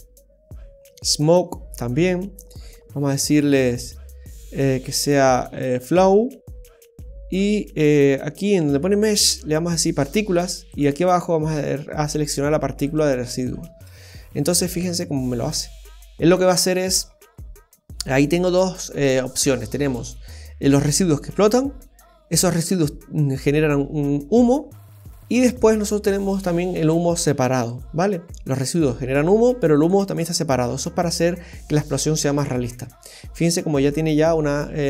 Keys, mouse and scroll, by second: 1.1 click, 2.3-2.8 scroll down 4, 3.1 click, 6.2-7.5 scroll down 9, 7.5 scroll down 2, 8.9 click, 10.7 click, 13.7 space, 27.7 click, 28.7 click, 29.8 click, 33.0 scroll down 1, 33.2 middle click.